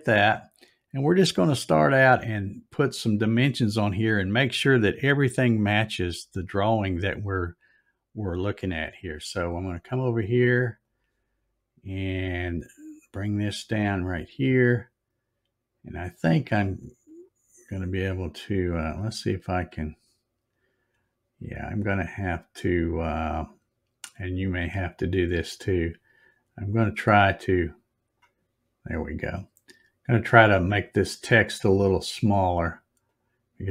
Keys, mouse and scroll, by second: 8.5 click, 10.8 click, 11.9 scroll down 3, 13.0 scroll up 1, 14.5 click, 16.2 click, 17.0 click, 18.2 click, 19.1 right click, 22.5 click, 24.9 click, 27.2-28.2 drag, 30.3 click, 33.1 click.